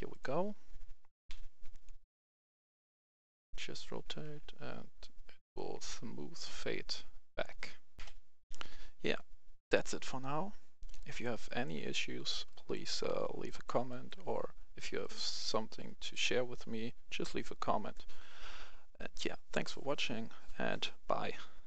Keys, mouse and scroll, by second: 0.2 w, 0.5 a, 1.2 e, 4.2 e, 7.9 w, 7.9 F10, 9.0 Escape, 10.9 right click, 12.0-12.4 scroll down 1, 12.4 right click, 13.1 scroll down 1, 13.4 right click, 14.4-15.0 scroll up 1, 15.0 right click.